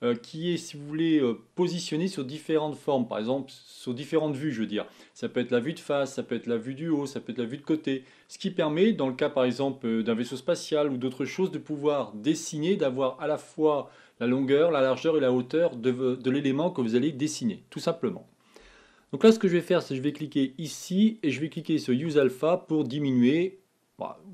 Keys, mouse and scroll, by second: 20.3 click, 21.6 click, 23.0-24.3 drag.